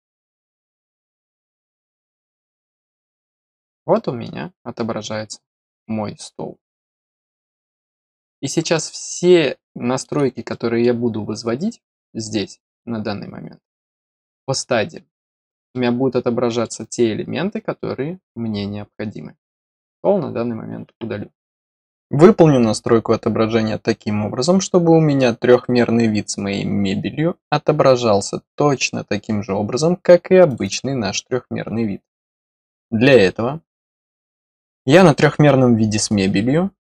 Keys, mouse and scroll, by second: 0.1 middle click, 1.6 click, 2.3 middle click, 3.1-3.5 scroll up 2, 3.9 middle click, 8.1-8.4 scroll up 1, 8.7-10.0 middle drag, 10.4 middle click, 15.7 middle click, 18.2 scroll down 1, 19.7 click, 30.4 click, 30.5 click, 32.0 click, 32.2 click.